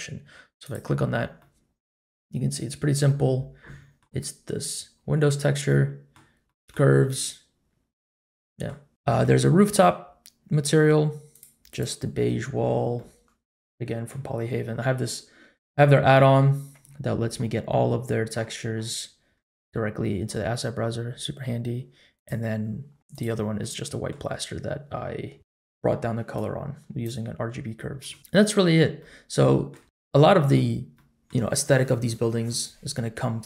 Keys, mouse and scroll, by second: 0.6 click, 1.4-2.2 middle drag, 2.4-3.0 scroll up 3, 3.0 middle click, 5.6-6.1 middle drag, 6.4 middle click, 8.3 middle click, 9.0-10.5 scroll up 1, 11.3 click, 11.7 click, 12.9-14.1 middle drag, 16.4-17.8 scroll down 2, 16.8-17.8 scroll up 1, 17.8-18.3 scroll down 1, 18.3-19.1 scroll down 11, 18.7-19.1 scroll up 1, 19.2 scroll down 1, 19.8-20.7 scroll up 1, 20.7-21.7 scroll up 1, 22.1 click, 23.1 click, 23.6-24.1 middle drag, 24.3-25.1 scroll down 1, 25.1-25.4 scroll down 2, 25.4 middle click, 26.3 click, 28.0 middle click, 28.1-28.5 scroll down 3, 29.0-29.7 middle drag, 29.8 scroll up 1, 30.1-30.5 middle drag, 30.9 middle click.